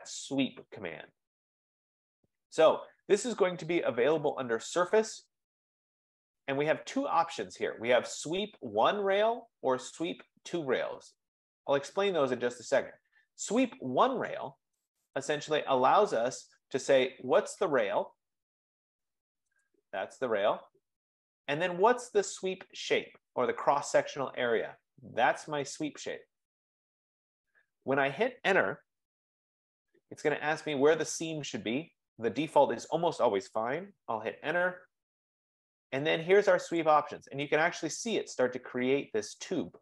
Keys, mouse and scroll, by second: 4.4-9.4 drag, 15.1 click, 16.5 F15, 19.7 click, 21.1-24.7 drag, 25.9-28.3 drag, 29.1 Return, 34.5 Return, 37.0 click.